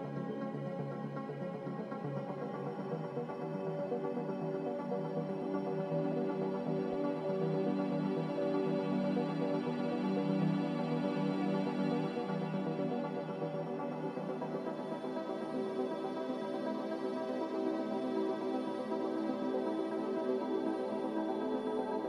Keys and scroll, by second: 1.6 ctrl+z, 5.2 z, 15.0-15.9 typing, 18.7-19.5 typing.